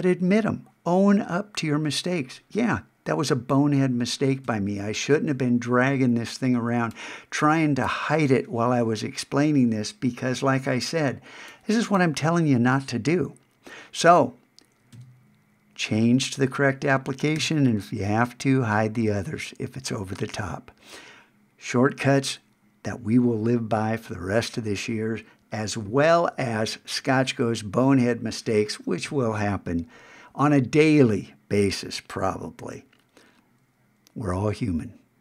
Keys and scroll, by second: 4.5 super+Tab, 14.9 super+Tab, 17.4 alt+super+h.